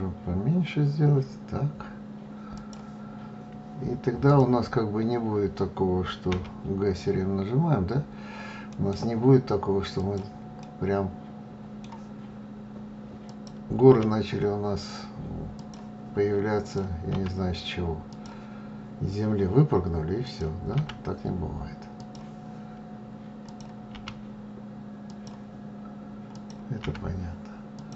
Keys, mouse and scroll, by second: 3.7 click, 5.7 g, 10.0-12.7 middle drag, 12.7 click, 13.3 g, 16.1 click, 16.5 g, 19.6 click, 20.2 g, 22.9 click, 23.3 g, 25.7 click, 26.2 g.